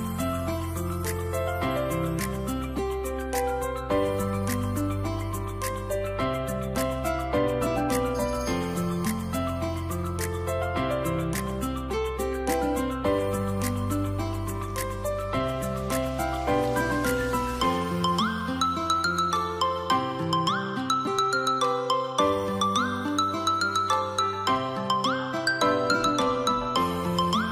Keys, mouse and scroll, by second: 2.2 double click, 3.4 typing, 3.9 Return, 6.4-10.2 scroll down 1, 10.2 scroll up 1.